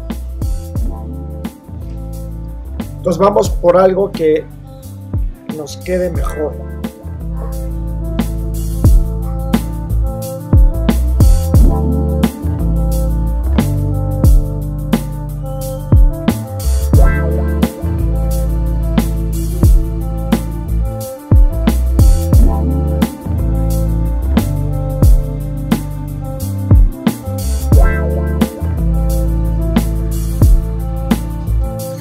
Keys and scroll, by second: 13.4 super+-, 17.8 super+c, 18.0 super+v, 18.2 super+-, 20.5 Return, 22.2 v, 25.6 BackSpace, 25.9 super+d, 26.1 super+0, 26.7 e.